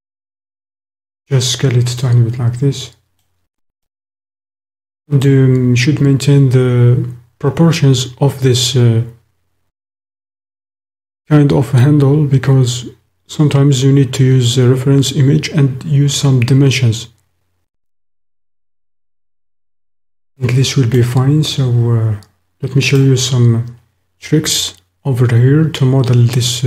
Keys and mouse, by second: 1.0 click, 1.9 click, 2.2-3.3 middle drag, 3.9-5.0 drag, 5.0 middle click, 19.8-21.0 middle drag, 21.6 click, 22.3-26.6 middle drag.